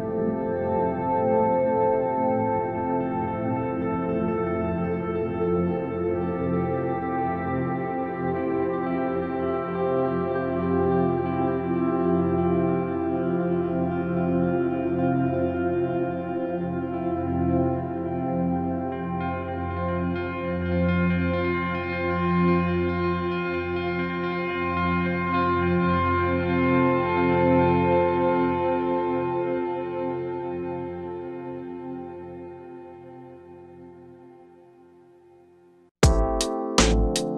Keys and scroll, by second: 2.3 space, 7.1 space, 10.5 space, 13.0 space, 16.7 space, 20.5 space, 26.2 space, 32.5 space.